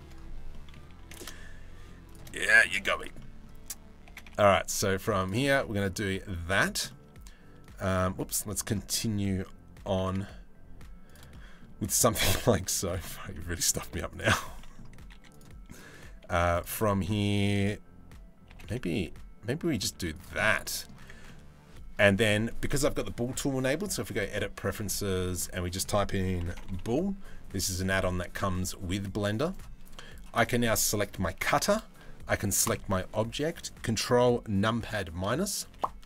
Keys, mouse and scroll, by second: 0.1 middle click, 0.6 g, 1.9 middle click, 2.4 3, 5.1 middle click, 5.8 Tab, 5.9-7.7 middle drag, 7.8 Tab, 8.1 middle click, 8.5 middle click, 9.5 g, 10.9 middle click, 11.5 middle click, 11.9 middle click, 12.2 z, 12.7 middle click, 13.5 ctrl+r, 14.2 middle click, 14.7 3, 16.0 2, 16.2 middle click, 16.4 middle click, 18.1 g, 19.5 z, 20.1 middle click, 20.6 Tab, 20.9 middle click, 21.5 click, 21.6 middle click, 23.7 click, 29.1 click, 35.4 ctrl+KP_Subtract.